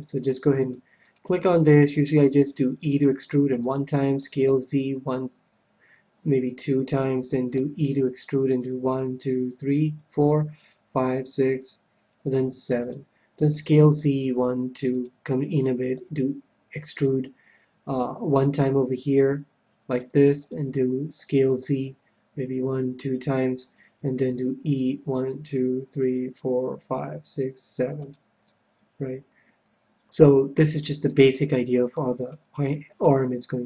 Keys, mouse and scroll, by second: 1.2-2.9 right drag, 2.4 e, 3.7-5.6 drag, 4.2 s, 6.8-8.6 drag, 7.5 e, 12.8-14.6 drag, 13.5 s, 15.0-16.7 drag, 16.0 e, 17.5 e, 20.4-22.2 drag, 21.1 s, 23.1-24.9 drag, 24.3 e, 28.1-29.8 drag, 28.4-33.6 middle drag.